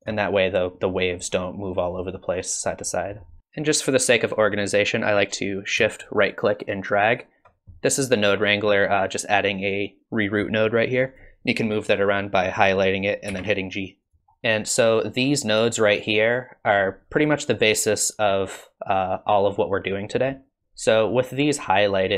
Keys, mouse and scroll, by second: 3.4 click, 3.4 middle click, 6.3 shift+right click, 11.1 click, 11.6 click, 13.3 g, 14.2 middle click, 14.2-14.8 scroll up 2, 14.9 click, 20.6 middle click, 21.1 click.